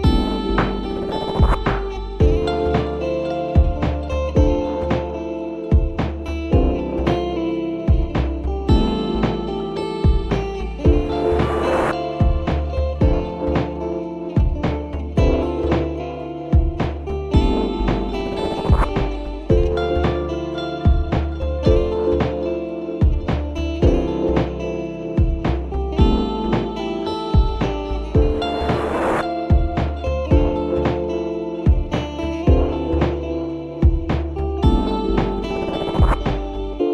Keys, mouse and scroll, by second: 5.3 scroll down 1, 5.4 click, 5.6 scroll up 3, 5.8-6.1 middle drag, 6.1-6.8 scroll down 1, 6.8 scroll down 1, 7.1-7.8 middle drag, 7.8-8.5 scroll up 1, 8.5 click, 9.8-15.1 drag, 15.3 click, 16.0 ctrl+z, 16.6-18.3 drag, 18.6-19.3 scroll down 3, 19.3-19.8 scroll up 2, 19.8-21.0 middle drag, 21.0 shift+a, 24.0 click, 24.4-24.8 scroll up 2, 24.8-28.0 middle drag, 28.0 scroll up 1, 28.1-29.8 shift+middle drag, 29.8 ctrl+alt+KP_0, 31.0 click, 32.3 g, 34.5-36.5 drag, 36.5 g.